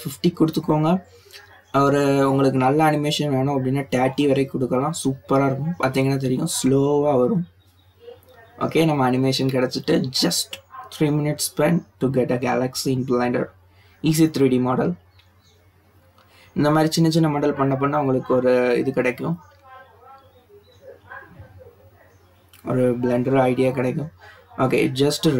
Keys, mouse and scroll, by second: 2.9-6.0 drag, 20.8-22.7 drag, 23.2 click, 24.5 click.